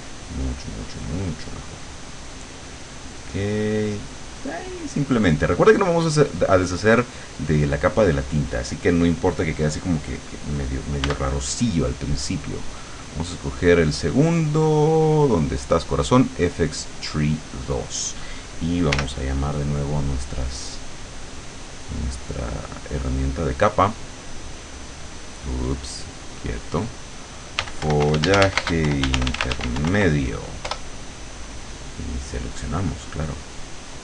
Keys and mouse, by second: 2.2 click, 2.9-4.7 drag, 11.1 b, 12.5-14.1 drag, 17.3 click, 19.0 l, 21.6 click, 22.5 click, 23.3 click, 24.2 right click, 26.4 click, 27.4-29.6 typing, 30.7 Return, 32.7 click.